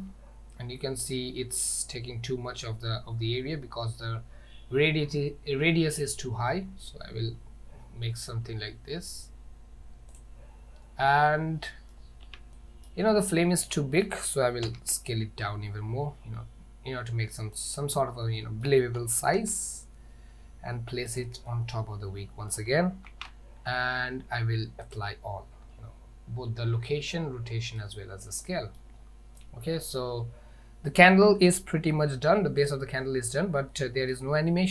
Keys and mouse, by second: 11.1 middle click, 12.3 Tab, 12.6-12.9 middle drag, 13.8-14.1 middle drag, 14.7 s, 18.5 middle click, 19.0 g, 21.5-22.6 middle drag, 23.2 ctrl+a, 27.0-27.8 middle drag, 28.5-28.8 middle drag, 29.5-30.0 middle drag, 33.8-34.2 middle drag.